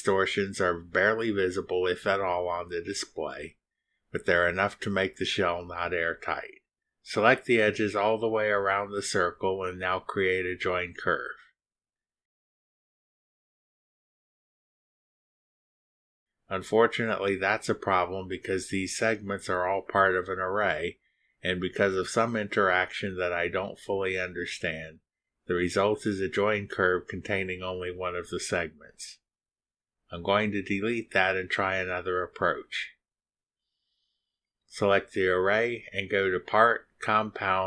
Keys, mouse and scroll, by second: 7.1 click, 7.5 ctrl+click, 8.2 ctrl+click, 8.7 ctrl+click, 9.7 ctrl+click, 10.3 ctrl+click, 10.7 ctrl+click, 11.3 ctrl+click, 13.2 click, 15.0 click, 15.9 click, 29.6 Delete, 31.8 click, 34.2 click.